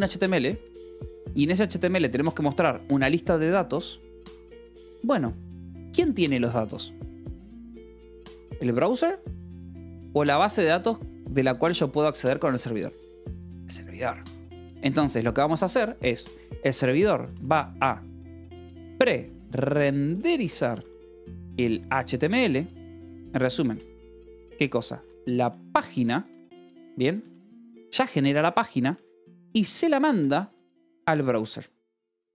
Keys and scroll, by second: 0.2-1.2 typing, 16.8 BackSpace, 18.3-22.8 typing, 24.5-27.0 typing, 27.4 Escape, 28.6 a, 28.8 space, 29.1 =, 30.1-31.4 typing.